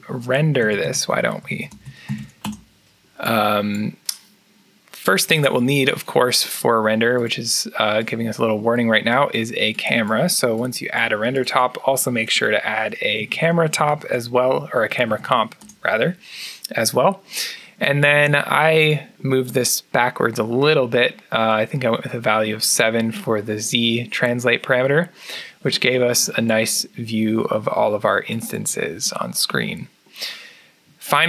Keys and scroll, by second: 0.4 shift+Tab, 0.8 shift+Tab, 1.1-3.8 typing, 13.0 shift+Tab, 13.4-15.7 typing.